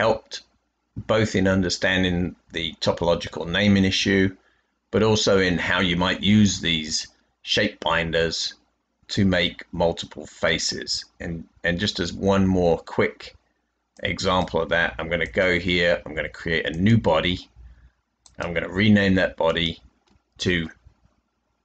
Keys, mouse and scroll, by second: 0.3-0.7 scroll down 2, 0.7-2.5 scroll up 4, 2.5-3.3 scroll down 2.